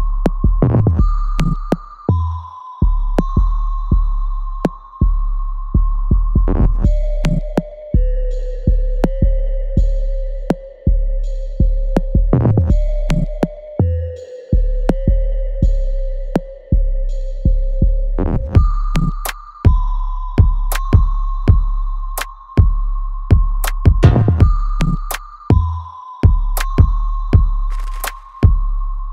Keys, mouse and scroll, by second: 4.6 click, 5.0 alt+right click, 5.4 alt+click, 6.0 alt+middle click, 6.5 click, 9.3 click, 9.9 e, 10.6 click, 11.6 ctrl+z, 12.1 click, 16.0 click, 16.1 alt+click, 20.0 click, 20.3 alt+click, 20.6 alt+right click, 21.1 alt+middle click, 21.5 click, 22.5 w, 23.2 click, 24.4 space, 25.4 alt+middle click, 26.4 click, 27.6 space, 28.4 click, 28.7 alt+click.